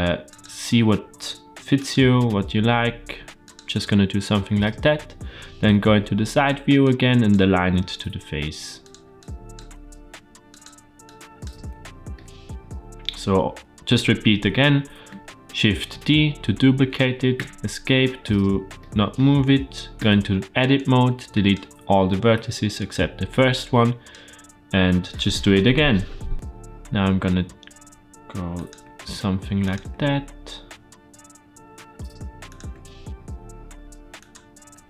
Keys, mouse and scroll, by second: 0.3 e, 2.0 e, 5.5 KP_3, 6.7 click, 7.7 g, 9.0 click, 9.4 g, 10.9 click, 11.4 g, 12.1 middle click, 15.8 shift+d, 18.6 middle click, 19.8 Tab, 20.6 click, 22.2 x, 23.4-23.9 drag, 26.3 e, 28.7 e, 29.7 e, 32.6 e, 34.7 Tab.